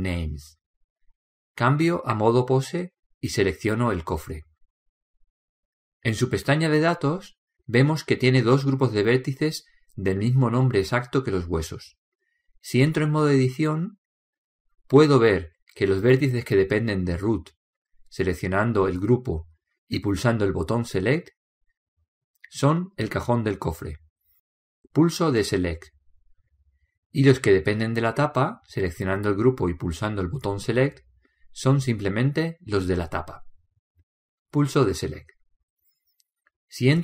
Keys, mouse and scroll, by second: 0.6-2.4 drag, 4.4-6.2 drag, 7.0-8.8 right drag, 9.4-14.2 drag, 14.4 Tab, 21.5-23.2 drag, 22.9-24.8 middle drag, 26.5-28.4 drag, 29.3-32.5 drag, 31.5-33.4 middle drag, 35.6-37.0 drag.